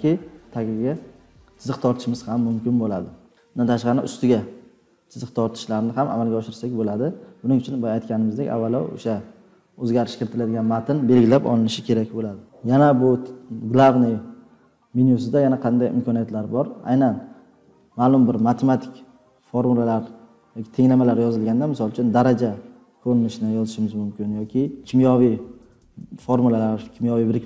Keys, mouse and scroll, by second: 19.4 2, 20.8 BackSpace, 21.7 2, 23.0 4.